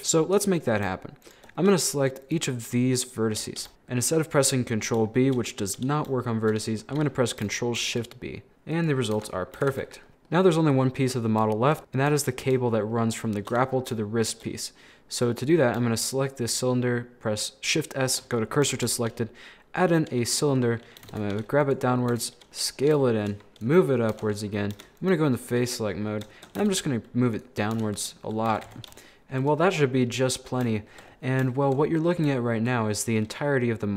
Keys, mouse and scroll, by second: 0.0-1.2 shift+middle drag, 1.2 shift+right click, 1.6 middle click, 2.2 shift+right click, 3.0 shift+right click, 3.5-4.8 middle drag, 4.8-5.1 scroll down 2, 5.1 shift+middle click, 5.5 scroll up 1, 5.7 scroll down 1, 5.7-7.8 middle drag, 7.8 ctrl+shift+b, 9.2 Tab, 9.4 scroll down 2, 9.6 a, 9.8 a, 9.9-11.3 middle drag, 10.5-11.3 scroll up 1, 11.4 scroll up 3, 11.5 shift+middle click, 12.2-15.3 shift+middle drag, 15.3 right click, 16.5 shift+s, 18.7 shift+a, 21.0 g, 22.2 s, 22.4 scroll down 2, 22.6 middle click, 23.5 g, 23.9 middle click, 24.2 Tab, 24.3 scroll up 4, 24.7 3, 25.0 right click, 25.4-26.3 scroll down 10, 25.7 middle click, 26.3 shift+middle click, 26.6 g, 27.8 Tab, 28.0 middle click, 28.3 scroll up 1, 28.5 a, 28.7 a, 28.8 shift+middle click, 29.5 scroll down 2, 29.6 middle click, 30.5 scroll up 4, 30.8 shift+middle click, 31.1-31.5 scroll up 1, 31.5-32.9 shift+middle drag, 32.9 scroll down 1, 33.0-33.9 middle drag.